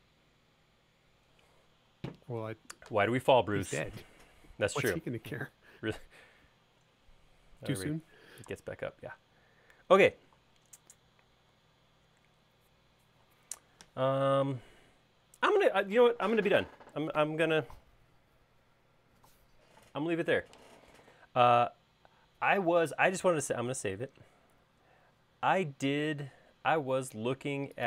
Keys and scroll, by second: 24.6 super+s, 25.7 alt+Tab.